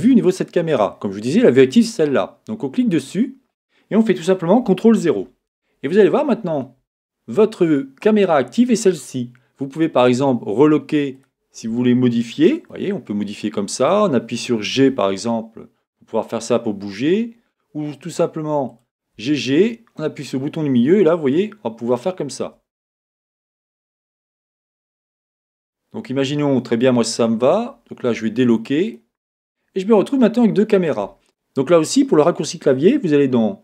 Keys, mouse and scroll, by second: 3.0-5.2 right drag, 5.2 ctrl+KP_0, 11.1-12.9 drag, 12.7-14.5 middle drag, 14.7 g, 18.8-20.7 drag, 19.1 g, 22.9-24.7 middle drag, 25.5-27.3 middle drag, 28.9-30.8 drag, 29.3-31.1 middle drag.